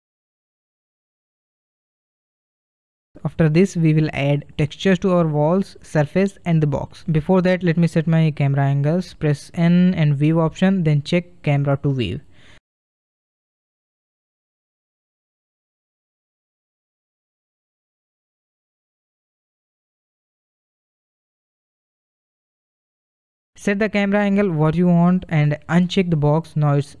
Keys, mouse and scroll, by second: 0.0-0.5 middle drag, 0.5 scroll up 1, 0.8-3.0 middle drag, 3.0 g, 5.5 g, 9.5 n, 11.3 click, 12.8 click, 14.4 KP_0, 15.6-16.3 scroll down 2, 16.3-19.0 middle drag, 19.0-19.5 scroll up 1, 19.5-21.9 shift+middle drag, 21.9-22.4 scroll up 1, 22.4-27.0 shift+middle drag.